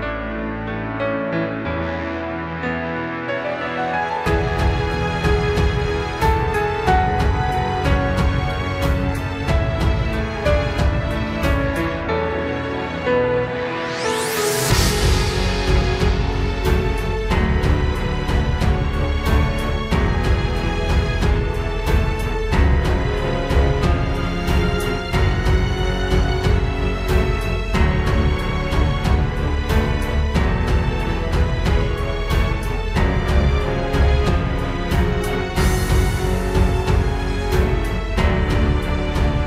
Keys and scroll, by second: 4.0 ctrl+z, 4.7 ctrl+z, 8.2 ctrl+space, 8.9 ctrl+z, 9.4 ctrl+space, 11.5 ctrl+space, 11.7 ctrl+z, 11.8 ctrl+space, 12.0 ctrl+z, 16.9 ctrl+space, 18.8 ctrl+space, 20.8 ctrl+space, 22.1 ctrl+z, 23.0 ctrl+z, 24.7 ctrl+z, 25.0 ctrl+space, 26.7 ctrl+z, 27.2 ctrl+u, 28.9 ctrl+space, 29.2 ctrl+z, 29.9 ctrl+space, 30.4 ctrl+z, 30.9 ctrl+space, 33.0 ctrl+space, 34.1 ctrl+space, 34.6 ctrl+space, 35.6 ctrl+z, 36.1 ctrl+space, 38.7 ctrl+space, 39.0 ctrl+s, 39.0 ctrl+space.